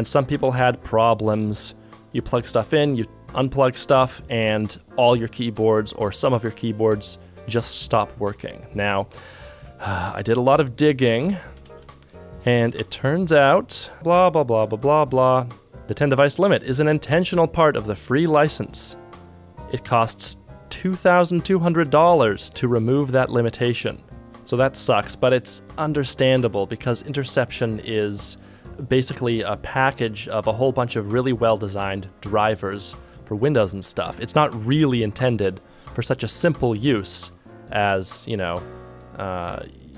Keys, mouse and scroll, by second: 9.9 ctrl+Tab, 10.7 ctrl+Tab, 11.5 ctrl+Tab, 24.2 ctrl+shift+Tab, 36.4 ctrl+Tab.